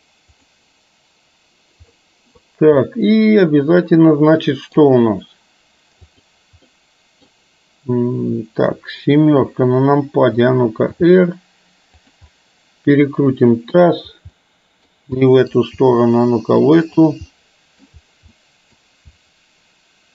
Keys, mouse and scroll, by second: 2.0 middle click, 2.1 scroll up 1, 2.1 middle click, 3.0-4.9 middle drag, 6.4 click, 6.7-7.2 middle drag, 9.5 KP_7, 10.9 r, 12.4 scroll up 1, 12.5-13.9 middle drag, 14.4-15.0 middle drag, 15.2 middle click, 15.9 r, 17.4-18.0 middle drag, 18.4-18.9 middle drag.